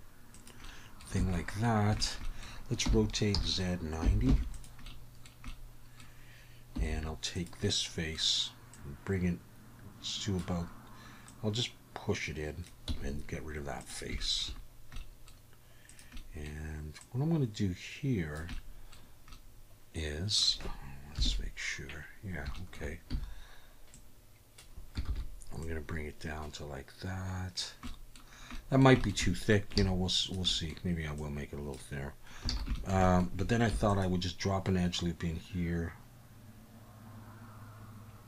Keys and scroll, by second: 1.2 a, 2.8 r, 3.3 z, 4.0 9, 4.3 0, 6.8 3, 12.9 x, 21.2 KP_3, 23.1 a, 25.1 ctrl+z, 29.8 alt+a, 32.5 alt+a, 33.7 ctrl+r.